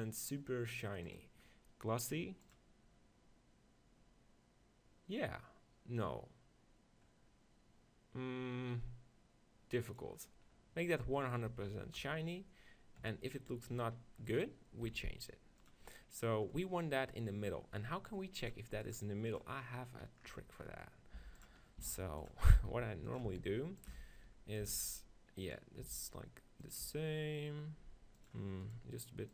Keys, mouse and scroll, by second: 10.0 click, 10.9 middle click, 11.1 click, 11.1 right click, 12.0 KP_1, 13.0 KP_3, 14.9 g, 15.7-17.5 drag, 17.5-18.7 middle drag, 18.7-20.5 drag, 21.2 g, 21.5-22.7 drag, 21.8 s, 22.9 g, 23.3 s, 24.0 g, 24.5-29.3 drag, 24.8 s, 25.9 g, 27.0 g, 28.7-29.3 right drag.